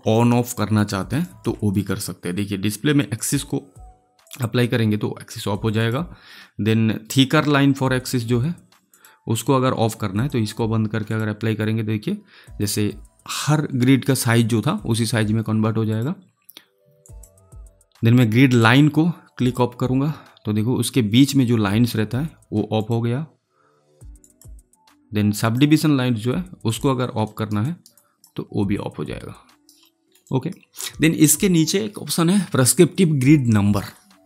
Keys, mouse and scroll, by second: 1.2 alt+right click, 3.1 click, 4.6 click, 8.8 click, 15.8 click, 22.7 click, 27.3 alt+right click, 27.9 alt+click, 29.5 alt+right click, 29.8 alt+middle click, 30.2 alt+right click.